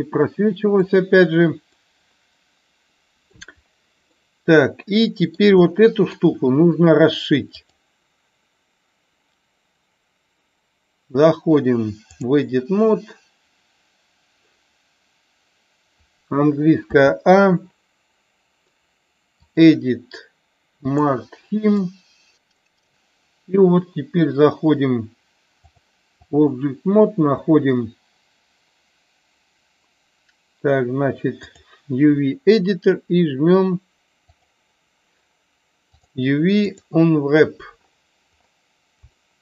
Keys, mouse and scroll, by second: 1.8-3.3 middle drag, 4.2-5.3 middle drag, 5.6-6.2 shift+middle drag, 7.6-12.3 drag, 19.6-21.1 drag, 21.8 middle click, 22.3 middle click, 25.9 click.